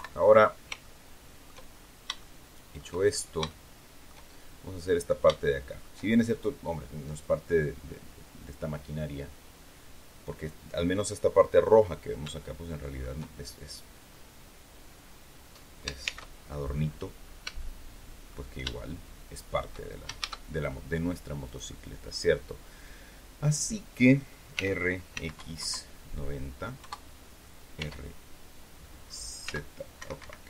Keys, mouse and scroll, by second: 0.7 shift+middle click, 1.6 shift+scroll up 2, 2.1 shift+middle click, 3.0 shift+scroll up 2, 3.4 shift+middle click, 5.3 shift+click, 12.3 shift+click, 14.0-14.3 scroll down 2, 15.9 shift+c, 17.3 shift+scroll up 1, 17.5 shift+middle click, 18.6-19.7 shift+drag, 20.1 shift+a, 21.4 click, 24.5 r, 25.0 x, 25.3 KP_9, 25.5 KP_0, 26.7 KP_Enter, 27.7 e, 29.4 x, 29.9 Escape.